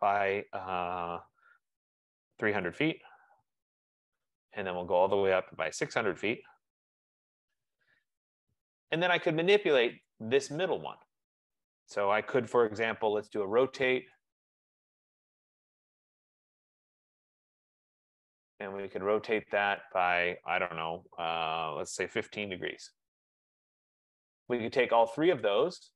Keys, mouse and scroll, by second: 2.5-3.5 typing, 3.2 click, 3.6 Return, 6.0-7.8 typing, 8.6 Return, 10.2 click, 12.2 typing, 13.3-14.8 typing, 16.9 click, 18.3 click, 18.3 typing, 21.7-22.6 typing, 24.1 click, 25.5 click.